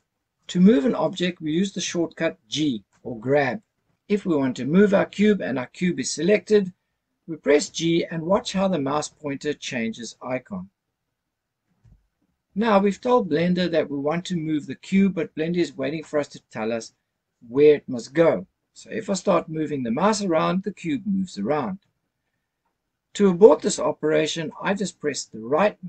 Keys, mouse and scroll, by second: 11.8 g.